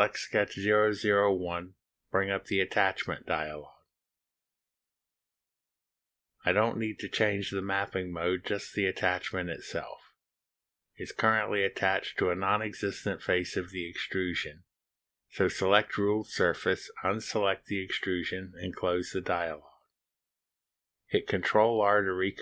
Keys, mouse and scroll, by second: 2.1 click, 6.8 click, 8.8 click, 16.7 click, 17.7 click, 19.9 click.